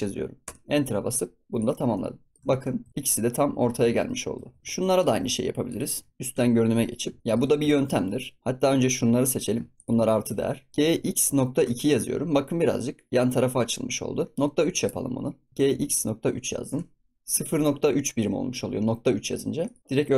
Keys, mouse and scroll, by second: 1.5 click, 1.9-2.4 middle drag, 2.4 ctrl+s, 2.4 scroll up 1, 2.5 shift+middle drag, 2.7 scroll down 3, 2.9 ctrl+s, 2.9-3.2 middle drag, 3.2-3.6 scroll up 3, 3.6 ctrl+s, 3.9-4.4 shift+middle drag, 4.4 ctrl+s, 4.5 scroll down 1, 4.6 ctrl+s, 4.9 click, 5.6 shift+click, 6.2 KP_7, 7.2-8.4 shift+middle drag, 8.7 click, 9.7 shift+click, 10.7 g, 15.5 g, 19.6 click, 19.8 ctrl+z.